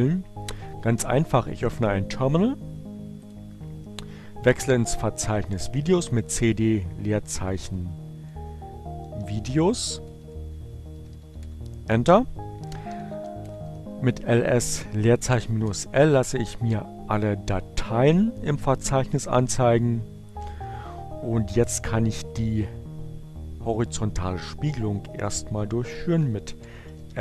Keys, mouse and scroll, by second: 5.4-9.5 typing, 10.5-13.4 typing, 13.6 Return, 16.5 click, 23.7 f, 26.0-27.2 typing.